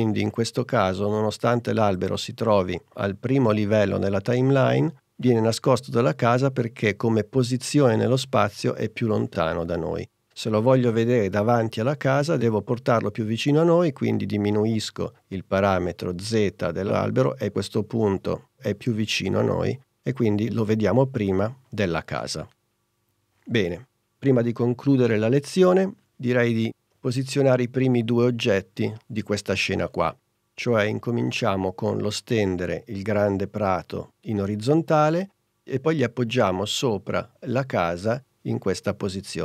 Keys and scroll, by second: 27.2 super+Tab.